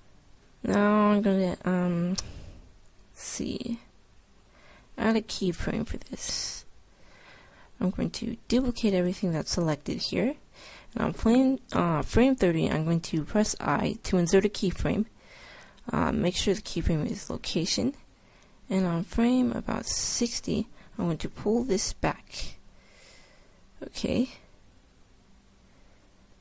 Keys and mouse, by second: 0.0 F11, 8.7 shift+d, 13.2 i, 22.0 g.